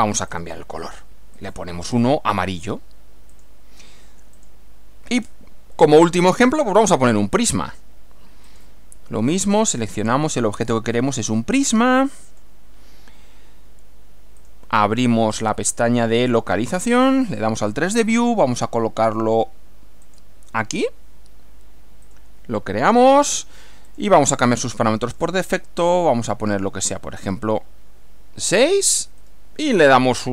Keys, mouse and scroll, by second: 0.3 click, 1.3 click, 2.7 click, 3.3 click, 4.3 click, 5.2 scroll down 2, 5.7-7.2 middle drag, 8.5 click, 9.7 click, 12.3 click, 14.5 click, 15.3 click, 16.8 click, 20.1 click, 22.1 click, 23.1 click, 23.9 click, 25.1 click, 25.5 scroll up 1, 27.2 click, 28.9 click.